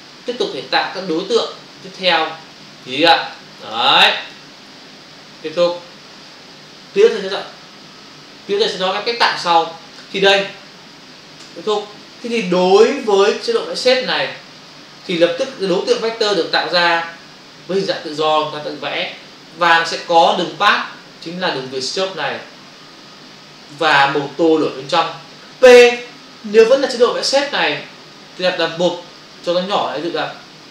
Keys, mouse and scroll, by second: 0.7 click, 1.7 click, 2.7 click, 3.3 click, 4.2 click, 5.6 click, 11.5 Return, 12.2 v, 17.7 click, 18.7 ctrl+space, 20.1 space, 28.5 click, 29.1 click.